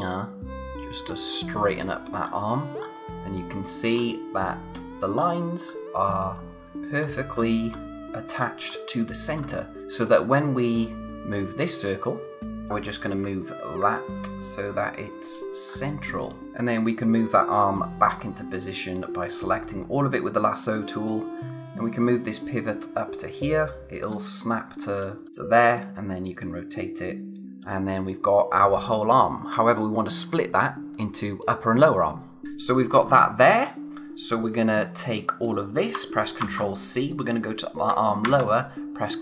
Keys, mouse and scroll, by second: 1.0 scroll down 1, 6.4 scroll down 1, 9.0 click, 9.4 space, 9.5 click, 9.8 space, 10.6 click, 11.1-11.9 scroll up 1, 11.9 click, 15.2 click, 15.7-16.2 scroll up 1, 16.2 click, 16.4 space, 17.1 click, 19.8 scroll up 1, 21.4 space, 21.5 click, 24.8 scroll down 1, 25.1 space, 25.3-25.8 scroll up 1, 25.8 click, 27.5 space, 30.9 click, 33.1 space, 33.2 click, 33.6 space, 34.4 click, 36.4 ctrl+c, 37.1 click, 38.2 ctrl+v.